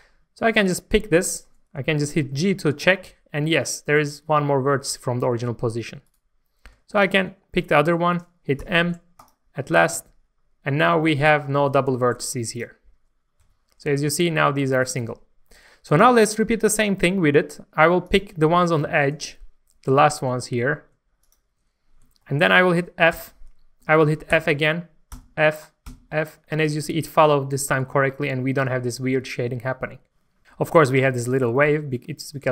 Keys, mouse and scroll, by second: 0.6 click, 1.3 shift+middle click, 6.1 right click, 6.9 shift+click, 8.6 m, 9.2 click, 9.9 alt+a, 10.2-10.8 scroll down 1, 10.8 middle click, 12.2-13.3 drag, 13.4 g, 14.9 right click, 15.4 middle click, 16.6 shift+middle click, 18.1 click, 18.3 scroll up 1, 18.6 shift+middle click, 19.1-19.9 scroll up 1, 20.0 shift+middle click, 21.2 shift+click, 21.8 scroll down 1, 22.2 shift+middle click, 23.1 shift+f, 24.3 f, 25.1 f, 25.9 f, 26.4-26.9 scroll down 1, 27.4 middle click, 27.8 Tab, 28.1-30.4 middle drag, 31.8 scroll down 1, 32.3 middle click.